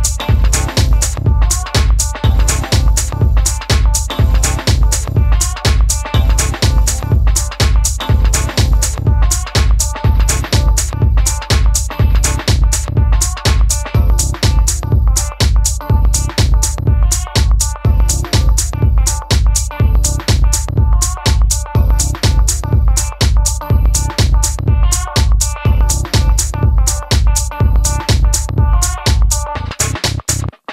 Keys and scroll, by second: 7.6 d, 13.3 Down, 13.3 Down, 13.4 Down, 13.5 Down, 13.7 Right.